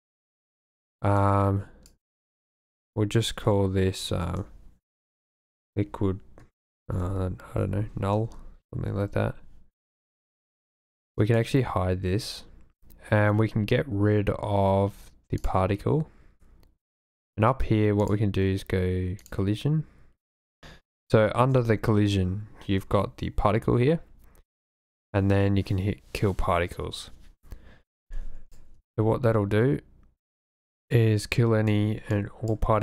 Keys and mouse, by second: 0.4 click, 0.6-8.3 drag, 3.5 BackSpace, 7.7 shift+l, 11.2 click, 15.4 click, 18.0 click, 28.0-28.6 drag, 28.8 space, 31.6 space, 32.1 click.